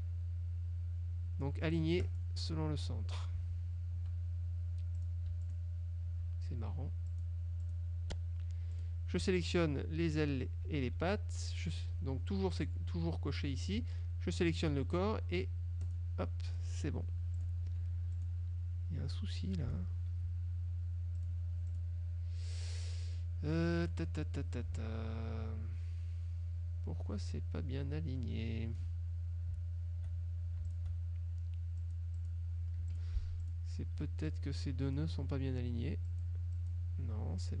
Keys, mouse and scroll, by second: 2.2 click, 5.1 click, 5.5 shift+click, 7.2 click, 7.7 click, 8.8 click, 9.6 shift+click, 14.6 shift+click, 16.0 click, 16.6 click, 17.5 click, 17.8 F2, 18.3 click, 19.2 click, 21.3 click, 21.7 F1, 21.8 click, 23.2 click, 23.9 click, 24.3-29.1 drag, 30.8 ctrl+shift+click, 31.9 click, 32.9 F2, 33.0 click, 33.6 click, 34.4 click, 36.2 click, 36.6 click.